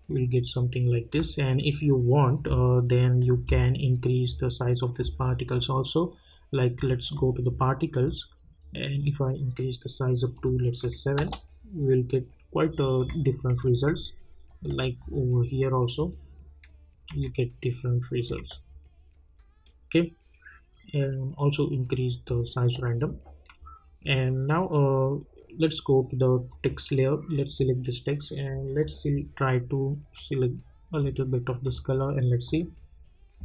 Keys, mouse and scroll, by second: 0.7-4.9 scroll up 1, 4.9 scroll down 1, 7.1 click, 8.0-10.3 scroll up 1, 10.3 click, 11.1 Return, 13.0 `, 13.6 `, 14.5 click, 17.1 `, 18.4 `, 26.5-31.6 drag.